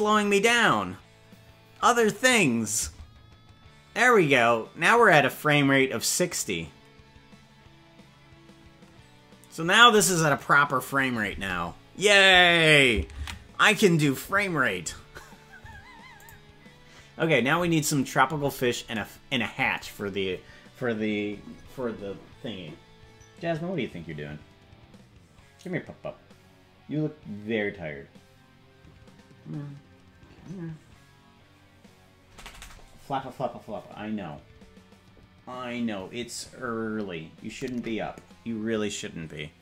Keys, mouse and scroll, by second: 2.8 space, 11.4 space, 14.8 ctrl+s, 16.2 click.